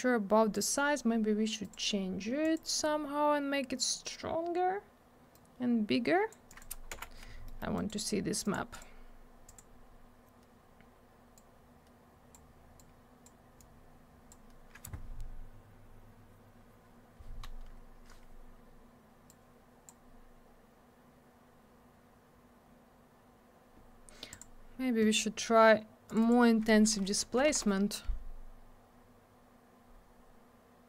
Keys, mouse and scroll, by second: 1.6 click, 1.7 click, 2.4 click, 2.5 click, 5.3 click, 6.5 click, 6.6 click, 6.9 m, 7.4 middle click, 7.6 middle click, 7.7 right click, 7.9 right click, 8.4 click, 8.5 click, 8.7 click, 8.8 click, 9.4 click, 9.5 click, 11.3 click, 12.7 click, 13.6 click, 19.2 click, 24.3 click, 24.4 click, 26.0 click, 26.1 click, 26.2 click, 26.3 click, 27.2 4, 27.5 Return.